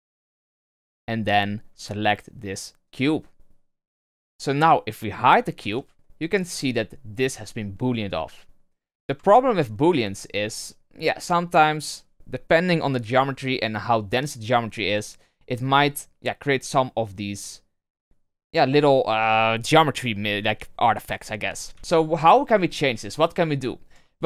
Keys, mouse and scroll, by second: 1.2 click, 4.4 right click, 5.7 h, 5.9-6.9 middle drag, 6.9-8.3 scroll up 1, 8.3-8.9 middle drag, 8.9 scroll up 1, 9.1 shift+scroll down 1, 9.3-9.7 shift+middle drag, 9.7-12.7 scroll up 1, 16.5-16.9 scroll down 1, 16.9-17.2 middle drag, 17.2 scroll up 2, 17.8-20.2 middle drag, 20.2-21.7 scroll down 1, 21.7 KP_3, 22.4-23.5 scroll down 4, 23.5-24.2 shift+middle drag.